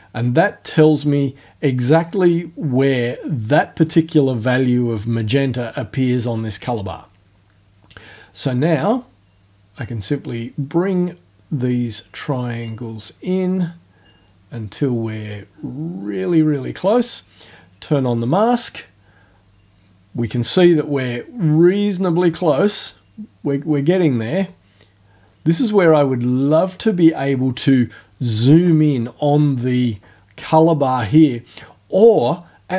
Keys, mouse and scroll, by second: 8.2-10.5 drag, 11.7-16.5 drag, 18.1 click, 22.3 click, 24.5 click, 25.5-26.9 drag.